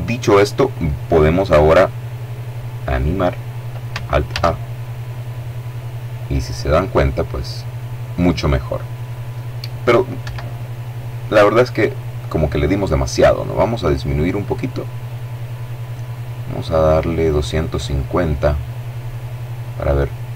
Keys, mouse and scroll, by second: 1.6-2.2 scroll up 1, 3.8 alt+a, 9.7 Escape, 12.8-19.8 drag.